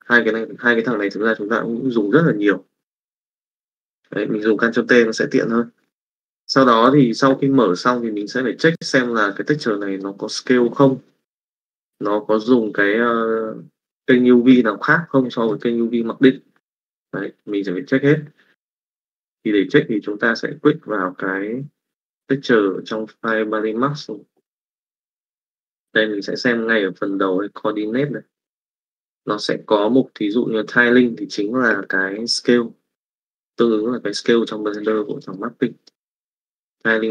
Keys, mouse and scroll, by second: 0.0 click, 0.9 click, 6.0 middle click, 9.9 middle click, 11.7-15.6 middle drag, 35.1 middle click, 35.9 middle click.